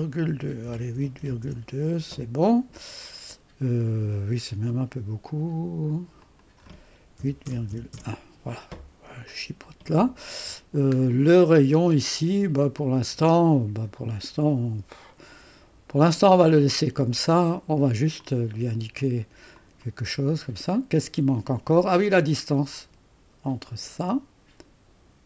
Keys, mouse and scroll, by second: 0.4-1.7 typing, 5.7 typing, 6.2 click, 7.2-8.0 typing, 9.3-11.0 drag, 11.0-11.9 scroll down 1, 13.5 click, 18.2 click, 19.6 click, 23.7 click.